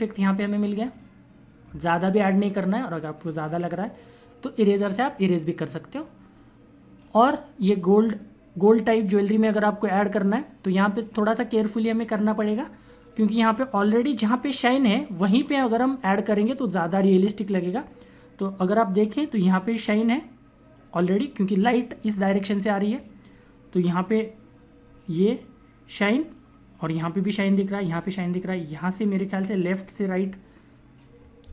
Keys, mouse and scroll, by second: 6.8 click.